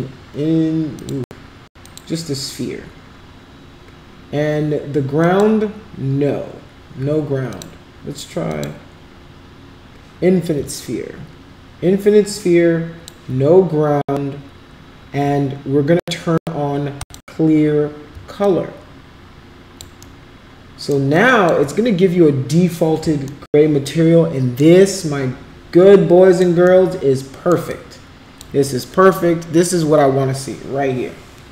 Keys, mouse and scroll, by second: 1.0 click, 5.3 click, 8.6 click, 10.8-13.1 alt+drag, 17.1 click, 18.4-19.8 alt+drag, 20.1 alt+middle click, 21.1 alt+click, 23.4-24.6 alt+middle drag, 24.8-26.4 alt+drag, 26.7 alt+middle click, 27.7 alt+click.